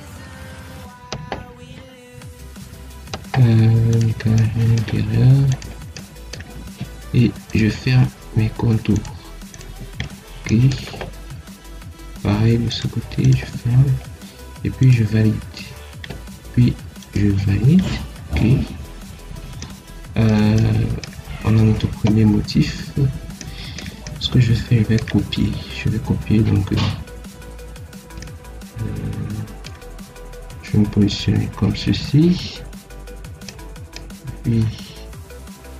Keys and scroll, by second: 6.7 Escape, 9.7 Escape, 13.4 Escape.